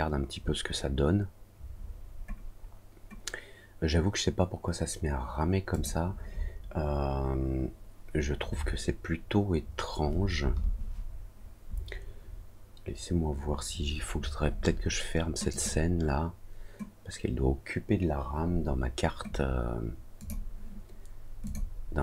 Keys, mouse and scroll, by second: 5.7 click, 15.5 click, 20.1 click, 21.4 click.